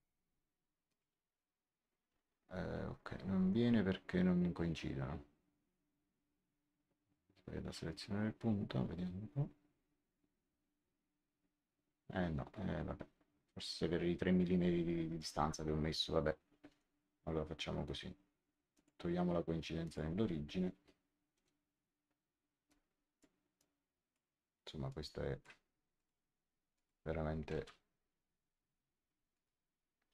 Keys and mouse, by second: 0.8 click, 16.6 Escape, 18.7 click, 19.7 click, 21.3 Delete, 22.6 click, 24.8 click, 25.9 click, 27.5 Delete, 29.2 click.